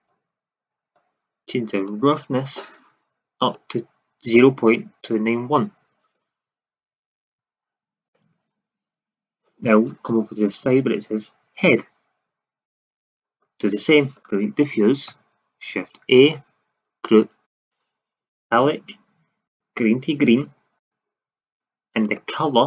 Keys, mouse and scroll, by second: 1.8-3.7 drag, 12.6-14.1 drag, 14.6 click, 15.0 Delete, 15.9 shift+a, 20.8 click, 21.3 middle click.